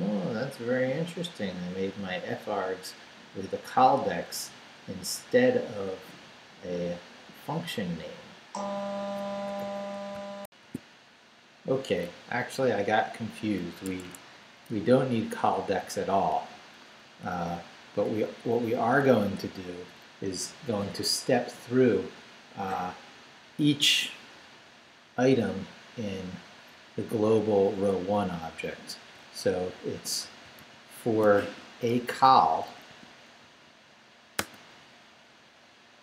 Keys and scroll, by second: 10.4 alt+shift+super+z, 12.6 u, 13.9 Escape, 14.7 u, 15.2 u, 15.9 u, 17.2 Down, 19.0 i, 19.2 Tab, 30.0-34.4 typing.